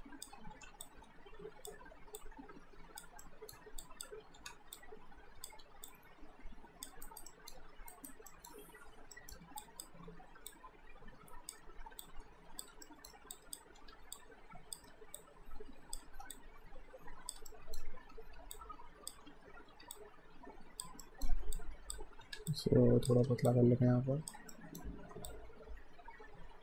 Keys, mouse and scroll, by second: 0.5 r, 0.8 click, 1.8 w, 2.2 click, 3.2 alt+middle click, 3.8 click, 4.4 r, 4.8 click, 5.6 w, 5.9 click, 7.0 alt+right click, 7.3 alt+middle click, 7.9 alt+right click, 8.3 alt+middle click, 9.1 alt+middle click, 9.6 click, 10.1 r, 10.5 click, 11.7 w, 12.0 click, 12.9 alt+middle click, 13.4 click, 13.8 r, 14.2 click, 14.9 w, 15.2 click, 16.0 r, 16.3 click, 17.5 alt+middle click, 18.2 typing, 18.5 click, 19.3-19.7 typing, 19.9 click, 21.0 alt+middle click, 21.5 click, 22.3 r, 22.5 click, 23.3 w, 23.5 click, 24.5 alt+middle click, 25.3 click.